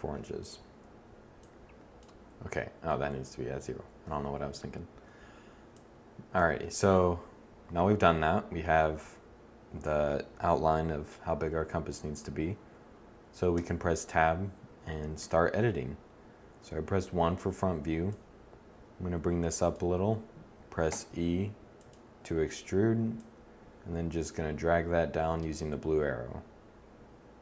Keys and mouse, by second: 13.4 Tab, 15.0 1, 20.8 e, 21.7-23.2 drag, 24.9-27.1 middle drag.